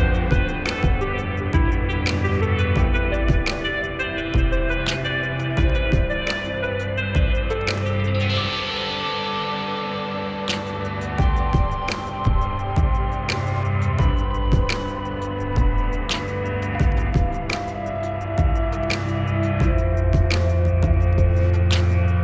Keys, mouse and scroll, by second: 2.9-11.7 drag, 15.7 click, 17.5-20.4 drag, 20.5 click.